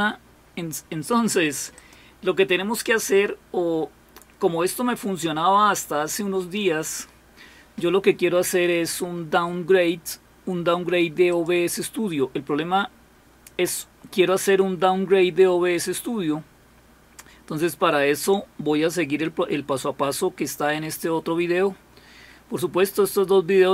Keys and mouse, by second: 1.7 click, 11.3 click.